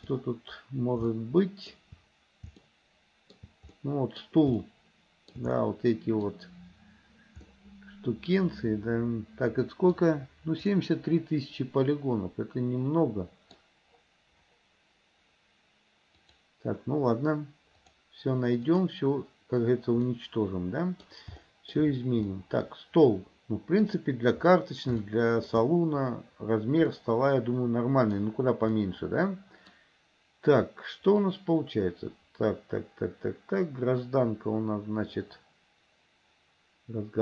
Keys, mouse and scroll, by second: 1.2-2.0 shift+middle drag, 2.7-3.6 shift+middle drag, 4.0-4.5 middle drag, 4.8-5.6 shift+middle drag, 5.8 middle click, 7.6-10.1 middle drag, 10.8-13.8 middle drag, 16.3 click, 18.0 click, 19.0 click, 20.2-21.2 middle drag, 21.6-22.0 shift+middle drag, 22.5-24.0 middle drag, 25.2 shift+middle click, 27.0-28.4 middle drag, 28.9-30.0 middle drag, 31.5-37.2 drag.